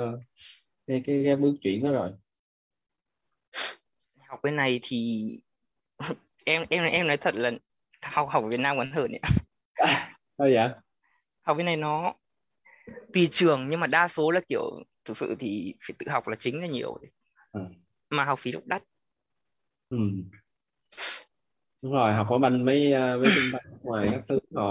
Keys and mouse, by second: 1.9 click, 22.3 click.